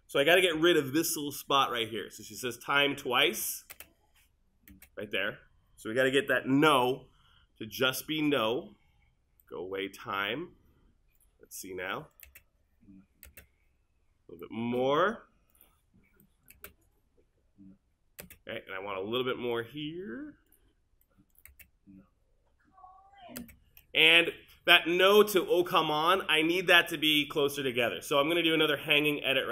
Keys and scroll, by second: 3.8 space, 6.7 v, 12.3 space, 16.6 space, 21.5 space.